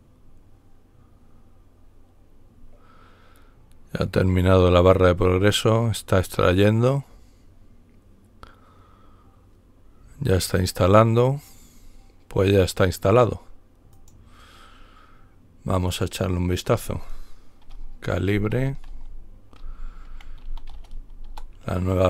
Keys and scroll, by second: 18.0-21.1 typing, 21.2 Return.